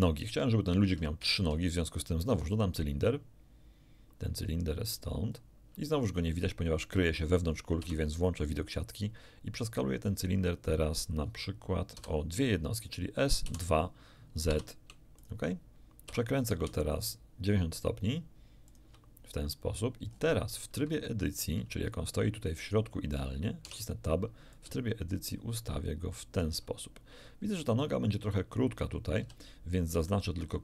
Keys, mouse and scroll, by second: 1.2 shift+a, 5.3 click, 7.8 z, 12.0 s, 13.4 z, 14.6 2, 15.2 click, 16.1 r, 18.7 ctrl+click, 20.1-20.8 scroll up 4, 21.0 shift+middle click, 21.3 shift+click, 21.8 shift+scroll down 2, 23.6 Tab, 24.5-26.6 ctrl+drag, 27.4-27.8 scroll down 2, 29.2 a, 29.9 b, 30.1 click.